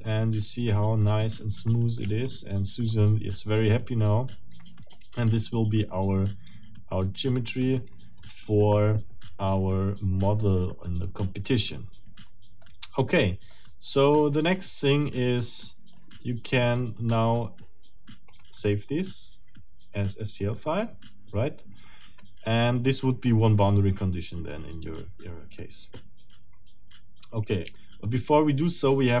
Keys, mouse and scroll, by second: 1.0-1.5 scroll down 1, 1.7 middle click, 2.0 Tab, 2.2 click, 2.6 scroll down 1, 2.9-5.1 middle drag, 5.3 middle click, 9.5-12.8 middle drag, 13.5-15.7 middle drag, 16.7 click, 18.3 middle click, 22.5 middle click, 23.6-25.8 middle drag, 27.7 shift+middle click, 28.6 shift+middle click.